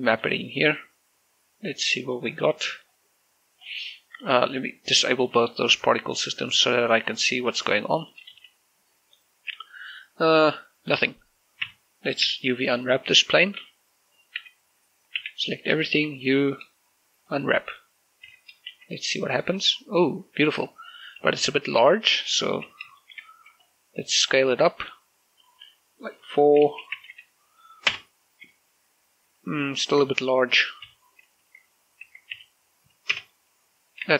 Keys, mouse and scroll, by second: 8.0 shift+middle click, 8.4 shift+z, 10.1-11.7 middle drag, 11.7 Tab, 12.3 a, 14.5-16.1 typing, 17.3 click, 18.3 Tab, 18.8 shift+z, 19.8-21.1 scroll down 1, 21.1 click, 21.3 g, 21.7 click, 22.6 ctrl+t, 23.1 shift+middle click, 23.3-23.9 scroll up 1, 24.4 click, 26.2 4, 26.7 Tab, 26.9 4, 27.0 Tab, 27.1 4, 27.9 Return, 29.9 click, 30.9 8, 31.5 Tab, 32.3 Tab, 32.4 8, 33.2 Return.